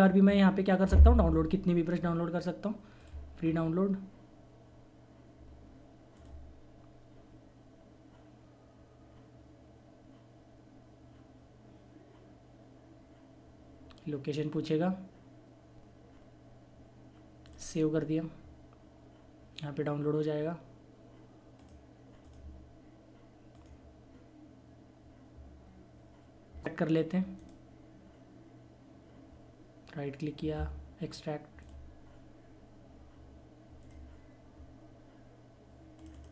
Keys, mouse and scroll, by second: 3.4 scroll up 1, 6.1 click, 17.4 click, 21.6 click, 21.6 typing, 29.5 right click, 33.6 click.